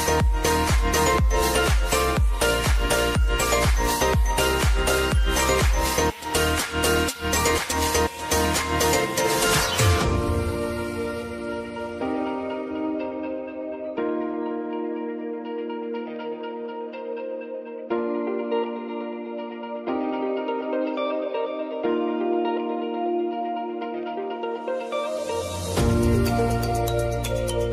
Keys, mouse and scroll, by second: 0.8 click, 3.1 -, 5.0 `, 6.3 click, 7.3 space, 10.9 space, 11.3 click, 12.3 ctrl+n, 14.1-16.8 typing, 18.0 Return, 21.6 ctrl+n, 23.5-26.1 typing.